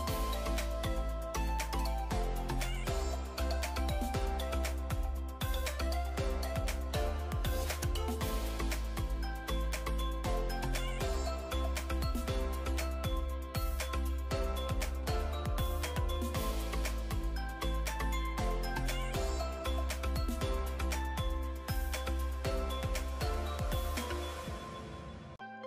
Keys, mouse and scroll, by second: 0.8 alt+d, 0.8-6.6 typing, 1.2 alt+d, 3.5 scroll up 3, 7.5 middle click, 7.7 scroll down 2, 7.8 scroll up 2, 8.2 g, 8.2 z, 8.8 middle click, 9.0 scroll up 1, 9.1 scroll down 3, 9.2 scroll up 4, 9.4 g, 9.5 z, 10.2 middle click, 10.4 scroll up 2, 10.9 shift+click, 11.1-13.2 typing, 13.1 double click, 13.7 middle click, 14.4-17.7 typing, 15.8 scroll down 1, 19.0-20.8 typing, 21.5 scroll up 2, 21.6-21.9 scroll down 10, 22.1 g, 22.4 z, 23.0 g, 23.1 z, 24.2 scroll up 1, 24.3 middle click, 24.6 KP_3, 24.9 scroll down 2, 25.0 alt+d, 25.6 y.